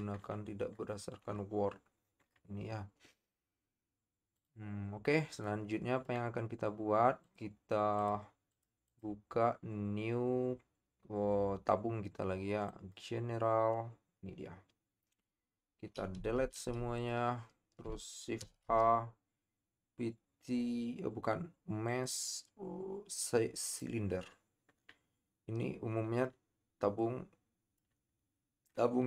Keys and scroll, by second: 18.4 shift+a.